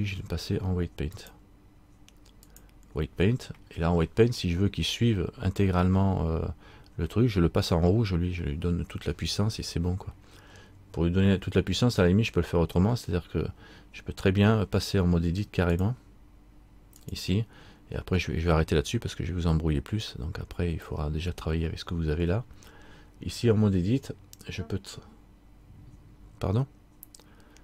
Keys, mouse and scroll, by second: 1.3 click, 15.9 click, 17.2 click.